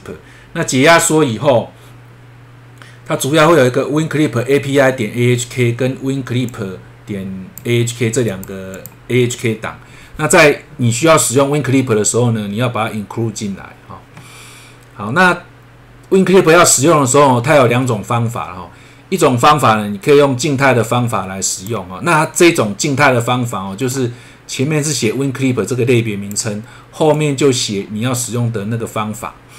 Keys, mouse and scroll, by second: 6.5 click, 8.3 click, 8.7 click, 14.8-16.0 scroll down 1, 20.6 click, 23.8 click, 24.9 click, 27.1 click.